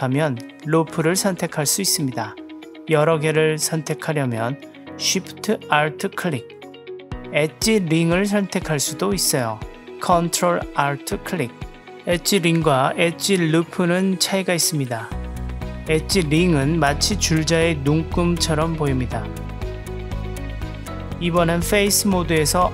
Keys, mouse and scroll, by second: 1.3 alt+shift+click, 3.0 alt+shift+click, 4.4 alt+shift+click, 6.5 click, 8.6 ctrl+alt+click, 13.9 alt+shift+click, 16.8 ctrl+alt+click, 20.8 click.